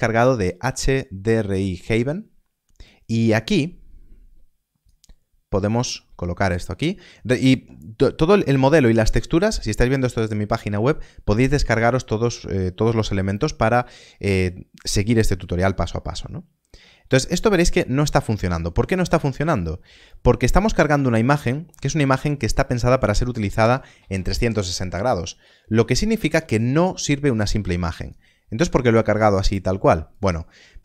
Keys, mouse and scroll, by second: 1.8 click, 15.2 click, 15.4 middle click, 16.6 click, 25.1 click, 25.1 middle click, 25.6 scroll down 1, 26.9 click, 30.0 click.